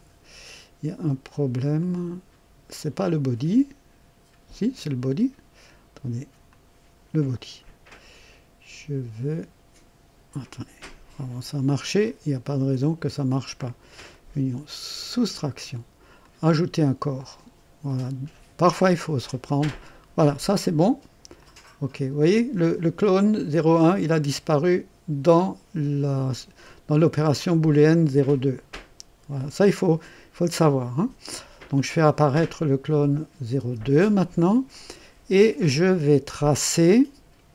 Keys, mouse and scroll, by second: 1.7 click, 2.9 click, 4.9 click, 6.4 click, 12.0 click, 14.0 click, 14.9 click, 16.2 click, 17.9 click, 19.2-20.5 drag, 21.3 click, 29.3 click, 31.7 click, 33.5 space, 34.6-36.6 drag, 36.8 click.